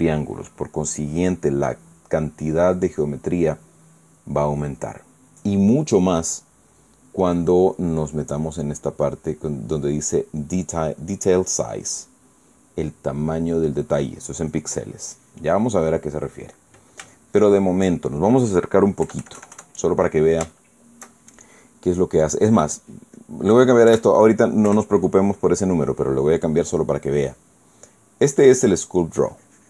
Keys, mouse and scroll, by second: 9.1 click, 17.9 shift+middle click, 18.7 shift+middle click, 19.1 shift+middle click, 19.8 KP_Add, 21.2 shift+middle click, 23.9 click, 24.6 3, 25.4 Return.